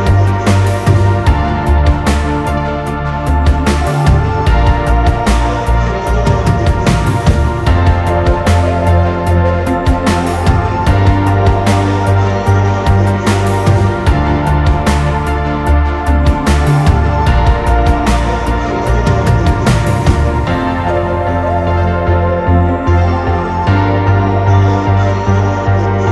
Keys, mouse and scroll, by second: 0.5 Escape, 0.5 scroll up 2, 0.7 scroll down 2, 0.9-1.4 scroll up 2, 1.0-1.4 typing, 2.2 click, 2.3-2.7 scroll down 2, 4.9 Return, 4.9 4, 5.3 space, 5.6 Delete, 6.1 Delete, 6.3 scroll down 1, 8.2 Delete, 8.3 middle click, 8.6-9.0 scroll down 1, 9.0-11.4 typing, 13.0 space, 13.5 Delete, 14.5-16.1 typing, 17.3 r, 18.7-20.9 typing, 22.7-23.1 typing, 24.1-25.4 typing.